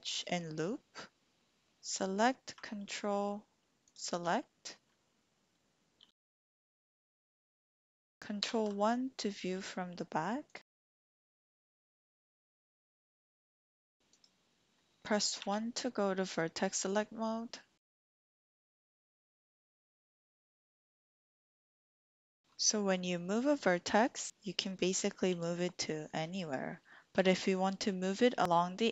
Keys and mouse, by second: 0.1-1.8 drag, 6.0 g, 7.9 click, 8.4 ctrl+KP_1, 10.5 click, 10.6 click, 11.1 g, 11.8 z, 13.8 click, 14.2-15.4 drag, 15.4 1, 19.0 Escape, 19.0 g, 19.2 g, 20.1 click, 20.5 g, 21.0 click, 24.1 g, 24.3 Escape, 25.3 g, 27.1 Escape.